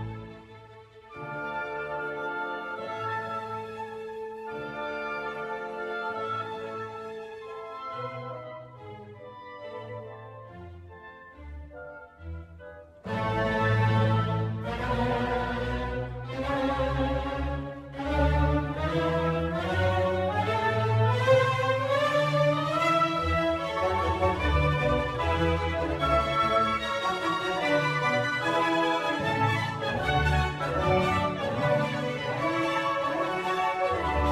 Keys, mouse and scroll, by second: 0.0-0.8 drag, 2.1-7.5 drag, 8.1-9.4 scroll down 1, 9.4-14.8 middle drag, 14.8 shift+a, 16.3 s, 20.6-21.2 scroll down 5, 21.6 g, 25.5 click, 28.1-29.3 drag, 29.3-29.9 scroll up 1, 29.9-30.7 shift+middle drag, 29.9 scroll up 1, 30.7-31.0 scroll up 2, 31.0-34.3 middle drag, 32.8 click, 33.9 click.